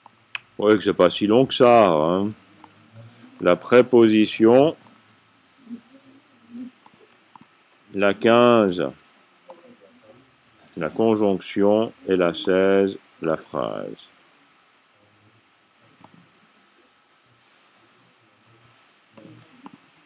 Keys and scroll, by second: 3.8 c, 6.2 typing, 7.2-8.3 typing, 19.6-20.0 typing.